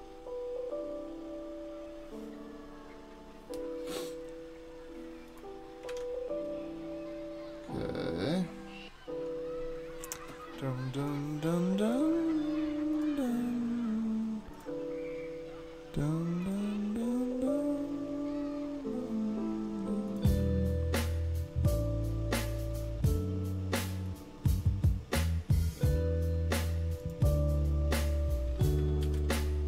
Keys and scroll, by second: 5.9 super+Tab, 29.0-29.6 typing.